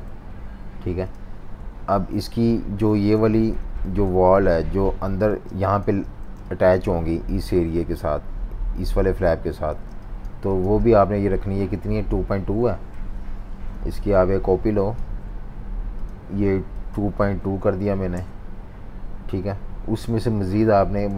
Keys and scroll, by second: 0.2 F19, 3.1 super+y, 3.5 super+y, 5.3-6.2 typing, 9.8-10.9 typing, 17.1-18.3 typing.